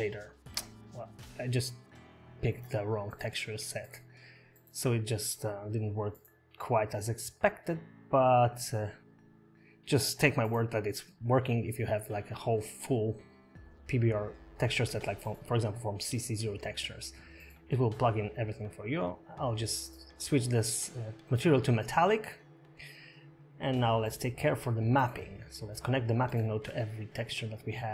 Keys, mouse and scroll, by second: 9.5 click, 9.5 scroll down 3, 9.9 click, 10.2 scroll up 6, 10.7 middle click, 10.9 click, 11.3 click, 11.6 middle click, 12.9 click, 13.7 shift+d, 14.8 click, 15.2 click, 18.2 click, 19.9 click, 20.1 middle click, 20.4 click, 21.8 scroll up 2, 22.0 middle click, 22.4 shift+middle click, 22.6 middle click, 23.0 shift+middle click, 23.6 scroll down 3, 24.5 shift+middle click, 24.5 scroll up 3, 25.1 middle click, 26.1 click.